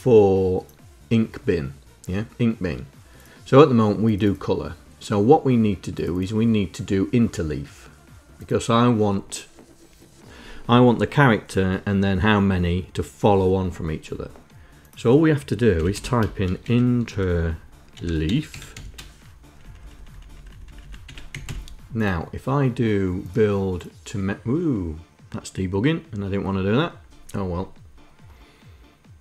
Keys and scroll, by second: 15.3-18.7 typing, 19.2 Left, 19.4 Left, 19.8 Left, 19.9 Left, 20.2 Left, 20.6 Delete, 20.8 Down, 21.0 Up.